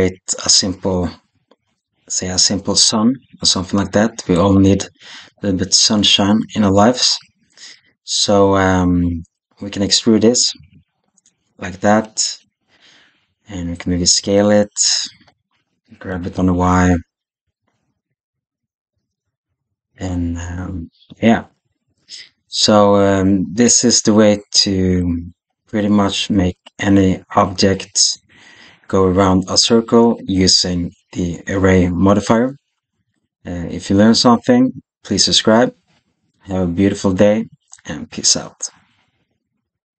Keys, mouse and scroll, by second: 4.2 click, 8.4 KP_7, 10.4 e, 14.0 s, 15.9 g, 21.4-24.4 middle drag.